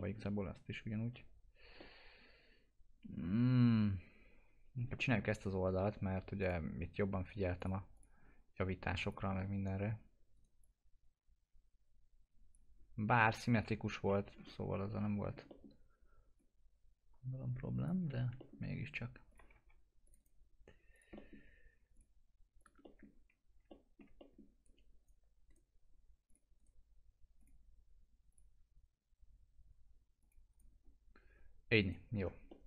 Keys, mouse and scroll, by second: 0.4-1.7 scroll up 1, 1.8-5.0 alt+middle drag, 5.3-6.4 scroll up 1, 6.4 click, 6.8-7.2 scroll up 1, 7.6 click, 10.3 right click, 10.6 click, 12.7 scroll down 1, 13.1 alt+middle click, 13.4 typing, 14.1 alt+x, 14.3 scroll up 1, 15.5 middle click, 16.3 click, 18.1 alt+x, 18.4 alt+middle click, 19.3 click, 19.5 1, 20.0 click, 20.2 right click, 20.9 click, 21.1 middle click, 21.9 click, 22.8 middle click, 23.1-23.6 scroll down 1, 23.8 alt+middle click, 25.0 right click, 26.3 click, 26.6 right click, 27.4 click, 30.5 right click, 30.8 scroll down 1, 31.8 right click, 32.1 scroll down 1, 32.5 alt+middle click.